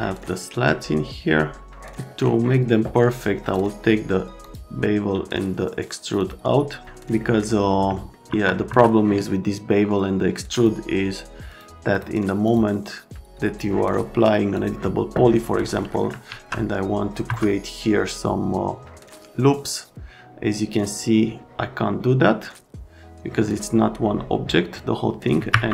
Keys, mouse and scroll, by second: 0.0 right click, 6.1 click, 7.2 middle click, 8.1 alt+middle click, 8.3 F3, 8.7 F3, 10.5 click, 11.5 click, 11.9 scroll, 12.4 scroll, 14.5 scroll, 15.7 right click, 16.2 alt+1, 17.2 F3, 25.5 Escape.